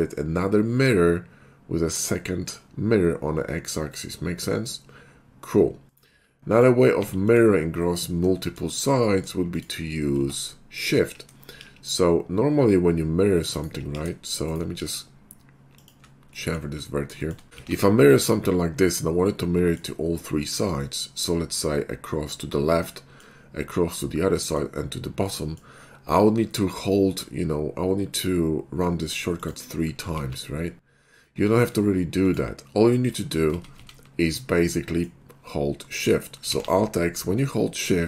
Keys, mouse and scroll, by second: 5.9 right click, 6.5 click, 7.0 x, 7.2 click, 8.2 middle click, 8.5 shift+middle drag, 8.8-9.3 middle drag, 9.5 click, 10.2 Tab, 10.7 click, 11.6 ctrl+shift+b, 13.6 shift+right click, 13.9 ctrl+b, 14.5 shift+right click, 15.8 shift+click, 16.3 shift+middle click, 16.8 shift+middle click, 17.2 shift+middle click, 17.6 alt+x, 19.6 alt+middle click, 20.9 middle click, 23.0 middle click, 24.5 middle click, 24.5 scroll up 1, 25.2-25.6 middle drag, 25.2-25.6 scroll up 1, 29.4 click, 30.1 alt+x, 31.4 middle click, 32.3 click, 33.6 ctrl+z, 33.8 ctrl+z, 34.4 middle click, 36.6 alt+x.